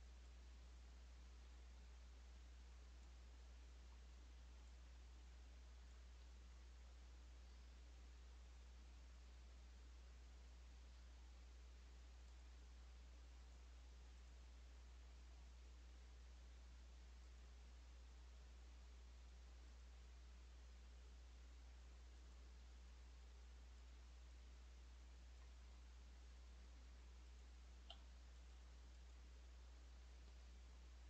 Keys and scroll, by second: 1.3 Tab, 1.7 Tab, 2.1 Tab, 5.1 Tab, 6.1 Escape, 22.8 Escape, 23.1 Escape, 26.0 Escape, 26.2 Escape, 26.5 Escape, 27.8 Delete, 28.5 Delete, 29.0 Delete, 30.5 Escape.